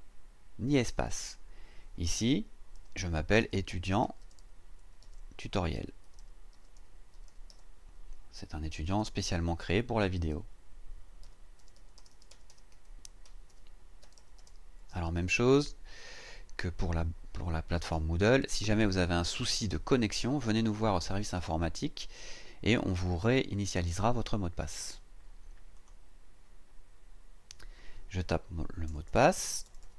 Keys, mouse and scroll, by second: 2.5-8.0 typing, 11.0-15.8 typing, 25.8 click, 28.9-29.9 typing, 29.4 KP_Divide.